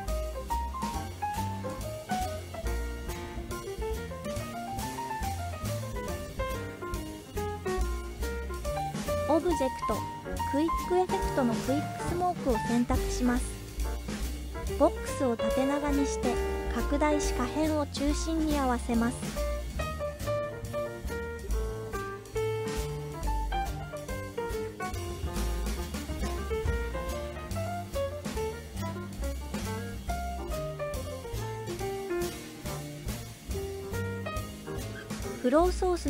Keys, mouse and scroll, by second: 0.6 space, 2.6 space, 3.3-4.4 drag, 4.6 space, 6.3 click, 6.4 click, 7.1 click, 8.3-12.2 drag, 13.8-14.2 scroll down 1, 14.5 scroll down 4, 14.6 s, 16.5 click, 18.1 z, 20.5 click, 23.0-23.6 shift+middle drag, 23.9-24.7 scroll up 2, 24.9-25.9 shift+middle drag, 24.9-25.6 scroll up 1, 27.5 click, 32.0-32.4 scroll down 1, 34.7 click, 34.7 scroll down 3, 35.3-36.0 scroll down 2.